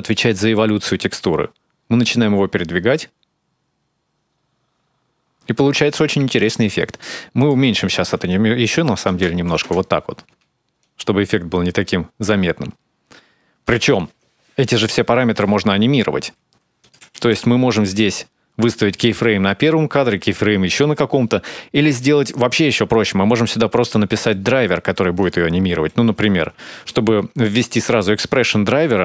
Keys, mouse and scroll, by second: 0.1 shift+click, 7.2 click, 10.6 shift+click, 16.6 click, 23.4-25.0 scroll up 2, 23.8 middle click, 25.0 click.